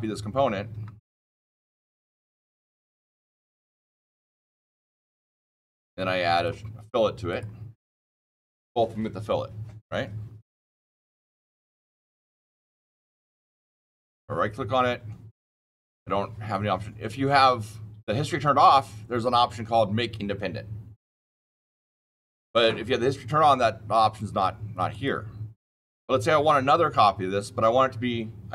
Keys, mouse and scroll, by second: 0.6 Escape, 1.7 ctrl+c, 2.0 ctrl+v, 3.3 click, 4.9 click, 6.3 click, 7.2 click, 7.8 click, 11.8 click, 12.7 click, 24.8 click, 25.5 click.